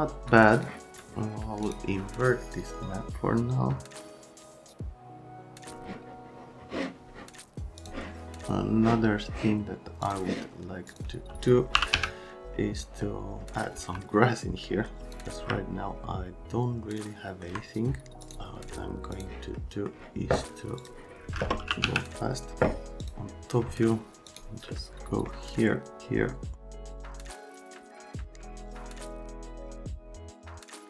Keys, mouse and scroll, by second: 0.3 click, 1.6 middle click, 7.8 middle click, 10.0 click, 10.9 click, 11.4-12.4 typing, 12.8 right click, 13.4 right click, 15.5 middle click, 16.6 right click, 18.2 click, 19.1 click, 19.6 middle click, 20.8 click, 21.3-22.3 typing, 23.0 middle click, 24.3 middle click, 24.7 right click, 26.7 click, 26.8 right click, 27.0 click, 27.1 click, 27.3 right click, 27.5 click, 27.6 click, 27.8 scroll down 1, 28.0 click, 28.3 click.